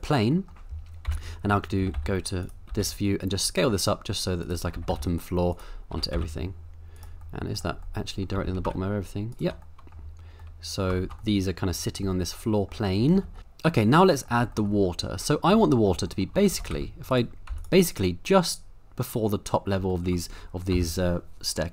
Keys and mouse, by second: 0.3 middle drag, 1.0 KP_7, 1.8 g, 1.9 y, 2.4 click, 2.7 s, 4.4 click, 4.7 g, 4.9 y, 5.5 click, 5.9 s, 6.1 y, 6.9 click, 7.3-7.6 middle drag, 7.9-8.2 middle drag, 8.3 g, 8.6 z, 9.3 shift+right drag, 9.8 middle click, 10.5-10.9 middle drag, 11.3-11.7 middle drag, 12.2-12.7 middle drag, 13.2 shift+middle click, 13.8-14.3 middle drag, 14.5 shift+middle drag, 15.4 middle click, 15.7 shift+middle drag, 16.1 middle click, 16.5 shift+d, 16.7 z, 17.1 right click, 17.5 x, 20.0 shift+middle click, 20.7 n.